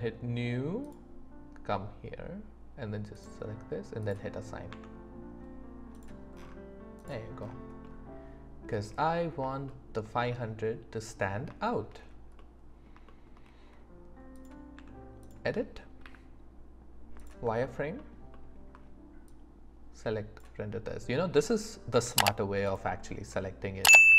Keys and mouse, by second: 0.8-3.2 drag, 4.7 Tab, 7.8 click, 7.8 right click, 9.6-10.0 shift+middle drag, 10.3 middle click, 10.6 right click, 10.6-11.4 middle drag, 11.6 shift+middle drag, 12.4-12.9 middle drag, 13.1 shift+middle drag, 14.7 Tab, 16.0 z, 19.3-20.4 drag, 22.0 z, 23.3 middle click.